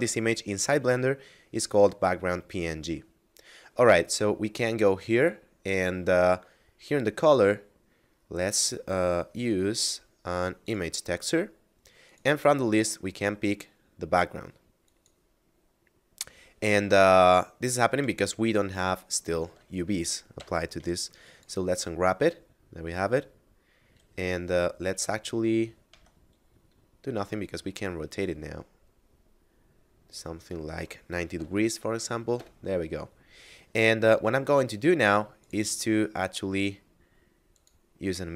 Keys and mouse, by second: 6.8 click, 10.2 click, 14.5 click, 18.4 Tab, 18.9 a, 19.7 u, 20.8 click, 25.5 Tab, 26.7 r, 31.0 typing, 31.8 Return, 35.0 click, 37.2 click.